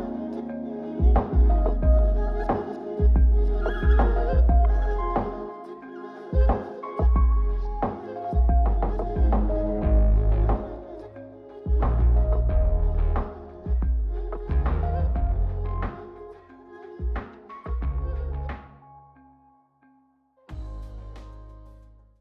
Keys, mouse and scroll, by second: 0.8 click, 2.6 click, 3.2 click, 3.7 click, 4.3 click, 5.3 g, 6.8 click, 7.6 Tab, 8.4 Tab, 9.4 g, 10.7 click, 11.3 g, 12.7 click, 13.3 g, 15.3 click, 15.7-17.9 drag, 15.7 right click, 18.9 click, 19.5 click, 20.3-21.4 middle drag.